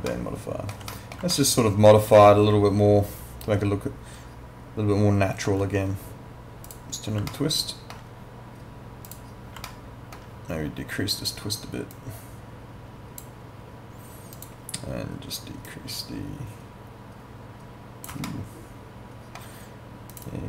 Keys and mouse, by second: 0.1 alt+middle click, 1.3 alt+middle click, 6.7 click, 7.3 alt+middle click, 9.1 click, 9.7 alt+middle click, 11.9 click, 18.3 alt+middle click, 20.1 click.